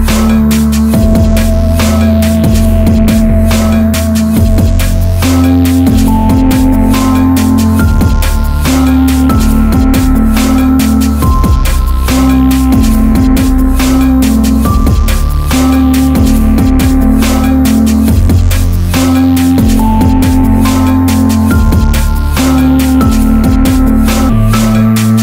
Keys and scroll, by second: 8.2 Up, 10.6 Down, 13.1 Up, 20.9 ], 23.8 ].